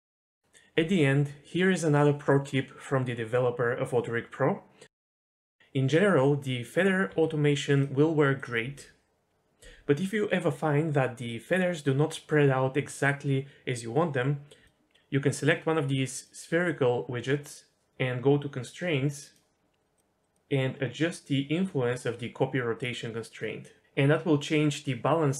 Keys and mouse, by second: 5.0 middle click, 7.1 r, 7.7 click, 8.6 r, 9.4 click, 9.6 r, 10.6 r, 11.3 shift+middle click, 19.8 click, 19.9 click, 21.6-23.8 drag, 24.8-25.3 drag.